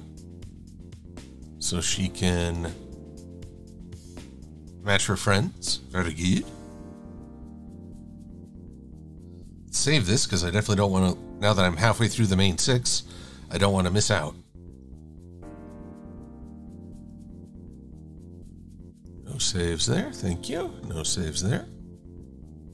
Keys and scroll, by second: 10.2 super+s.